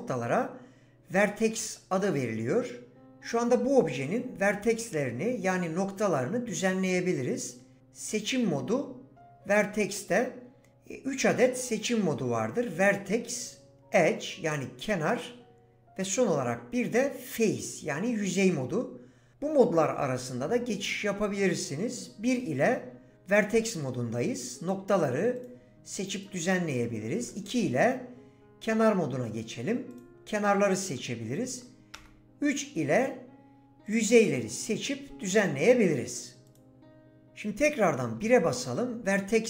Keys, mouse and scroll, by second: 24.6 click, 25.4 click, 27.2 2, 29.9 click, 30.6 click, 32.0 3, 33.9 click, 34.5 click, 38.2 1.